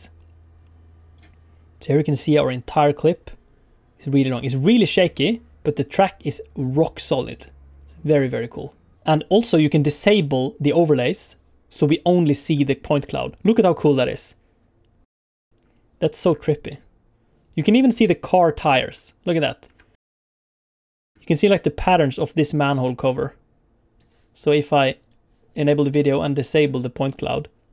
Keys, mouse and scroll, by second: 2.0 click, 11.9 click, 12.4 space, 15.4 ctrl+space, 17.6 space, 18.8 space, 19.6 space, 20.1-21.1 alt+scroll up 12, 21.1 shift+middle click, 21.1-21.8 alt+scroll down 5, 21.8 click, 25.0 click, 26.1 click, 26.9 click.